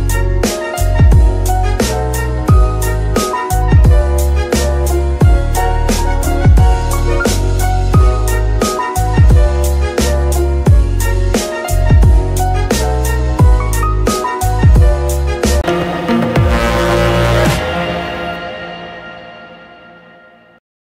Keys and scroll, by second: 0.2 g, 1.6 Escape, 3.8 r, 4.3 Escape, 5.4 g, 6.0 Escape, 7.1 g, 8.2 Escape, 9.5 g, 10.3 Escape, 11.0 g, 12.2 Escape, 12.7 r, 12.9 x, 14.7 Escape.